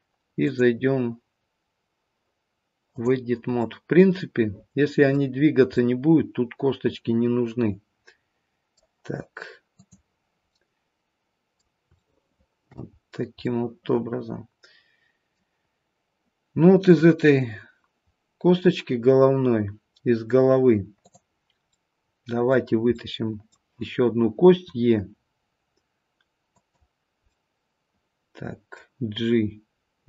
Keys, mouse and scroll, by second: 5.4 scroll up 2, 5.7 middle click, 9.7 click, 10.5 middle click, 12.0 shift+middle click, 13.0-13.5 scroll up 2, 13.5 middle click, 16.8 click, 18.0-19.9 scroll down 2, 19.9-21.1 scroll down 1, 21.1 click, 21.8 middle click, 22.9 middle click, 24.5 e, 27.3 middle click.